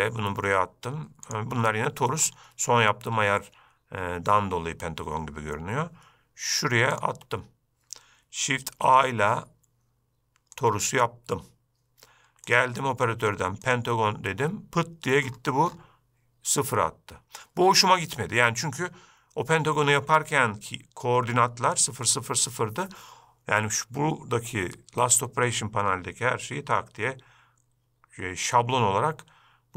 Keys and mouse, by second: 2.4 middle click, 7.1 shift+right drag, 8.9 shift+a, 12.7-13.9 drag.